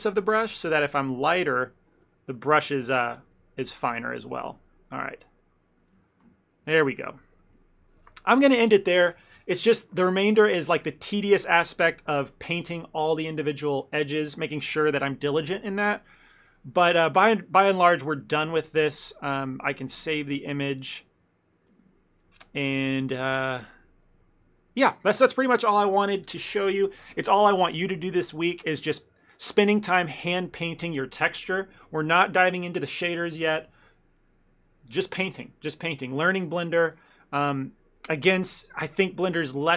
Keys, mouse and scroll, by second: 0.0 ctrl+middle click, 0.9 click, 1.2-3.0 click, 3.4 click, 3.7 ctrl+middle click, 3.9 ctrl+middle click, 5.5 click, 6.2 ctrl+middle click, 6.6 middle click, 6.8 ctrl+middle click, 7.1 middle click, 7.4 middle click, 7.5 ctrl+middle click, 7.6 ctrl+middle click, 11.4 ctrl+middle click, 11.8 middle click, 16.8 middle click, 17.0 ctrl+middle click, 17.2 middle click, 17.7 ctrl+middle click, 17.9 middle click, 18.5 ctrl+middle click, 20.6 click, 22.5 ctrl+middle click, 22.8 middle click, 23.0 middle click, 23.2 ctrl+middle click, 23.4 ctrl+middle click, 24.4 middle click, 24.7 ctrl+middle click.